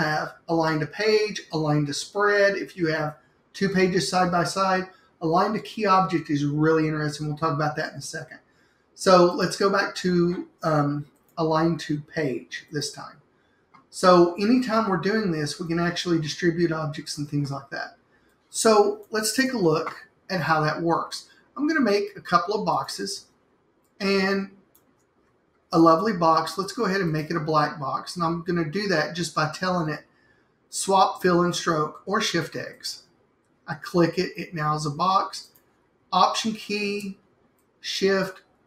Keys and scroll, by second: 19.5 BackSpace.